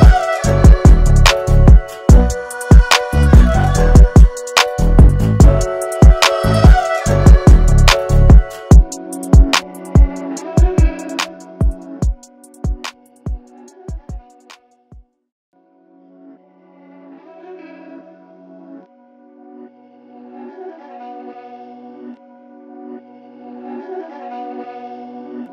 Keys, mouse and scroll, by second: 5.7 ctrl+[, 8.0 click, 8.6 alt+scroll up 1, 8.9 space, 9.1 click, 9.7 alt+scroll down 1, 10.0 space, 10.1 click, 17.4-19.3 drag.